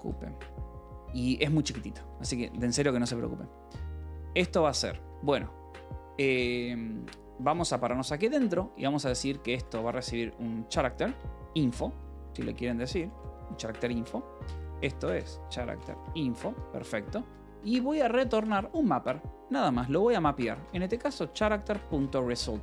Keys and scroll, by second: 0.0-0.2 typing, 1.1 alt+Tab, 1.9 a, 2.3 BackSpace, 4.9 Escape, 5.1 k, 6.9-18.9 typing, 16.3 Escape, 20.0-22.2 typing, 22.3 Escape.